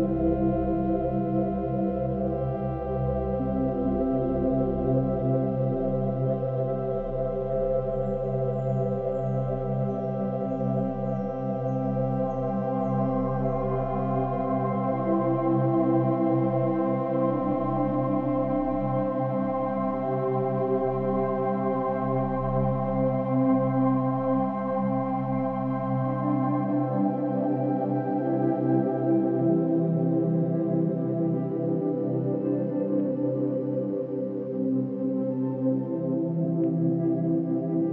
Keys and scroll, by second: 4.8 b, 6.0 space, 6.9 ], 10.5 space, 14.3 space, 20.1 space, 24.3 ].